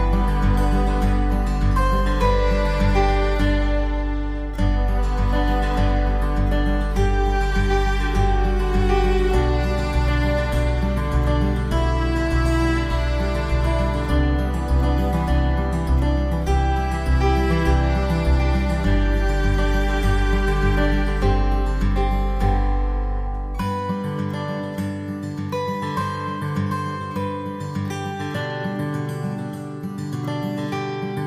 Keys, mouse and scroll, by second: 0.9 KP_1, 3.4 middle click, 4.2 middle click, 5.2 click, 6.5 middle click, 8.0-8.5 scroll up 3, 8.5 middle click, 9.7 click, 10.3 middle click, 11.4 right click, 13.7 g, 17.1 middle click, 20.5-21.3 scroll down 3, 21.3 middle click, 24.2 click, 25.9 click, 27.0 ctrl+r, 28.5 middle click, 30.7 click.